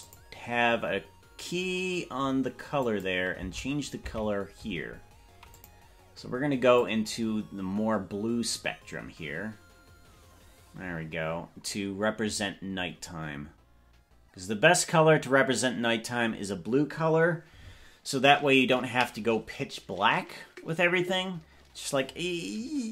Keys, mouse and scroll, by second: 0.1 click, 2.9 click, 3.7 Left, 4.2 Left, 5.5 click.